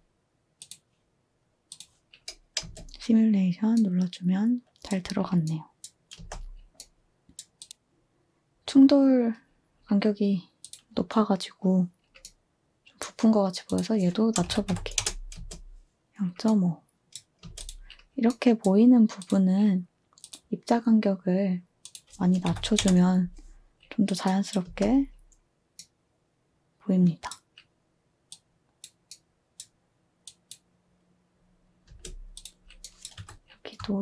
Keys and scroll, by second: 2.6 space, 6.1 space, 14.1-16.3 typing, 17.4 space, 22.2-23.0 typing, 24.6 space, 31.8-33.6 typing.